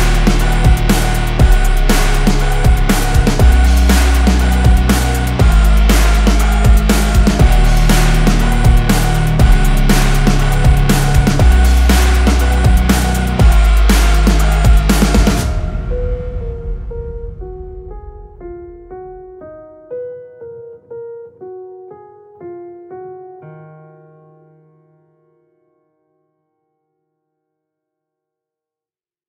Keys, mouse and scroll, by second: 1.4 alt+scroll down 1, 2.2 alt+scroll up 1, 2.5 alt+click, 5.4-5.7 alt+scroll down 1, 7.5-7.9 alt+scroll down 1, 10.4 click.